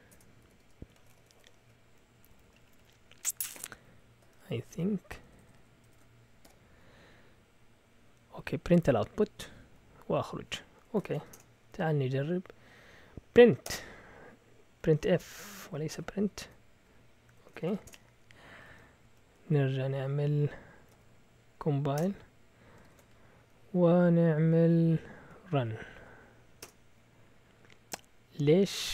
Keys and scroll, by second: 0.0-5.2 typing, 6.4 typing, 9.4 typing, 10.8-11.6 typing, 13.6 Return, 14.4-18.0 typing, 15.8 Right, 18.5 Up, 18.6 Up, 19.0 Up, 19.3 Up, 19.9 Up, 20.9 Up, 22.0 Return, 22.8 ctrl+l, 23.7 Up, 24.3 Up, 25.2 Up, 25.8 Up, 26.6 Return.